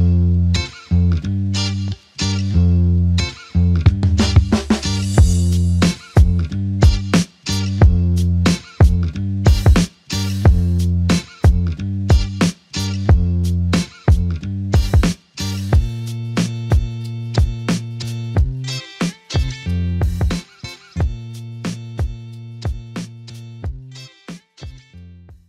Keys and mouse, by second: 5.9 alt+click, 7.7 alt+click, 10.1 typing, 11.4 double click, 15.0 shift+click, 18.8 shift+click, 20.0 shift+click, 22.7 ctrl+click.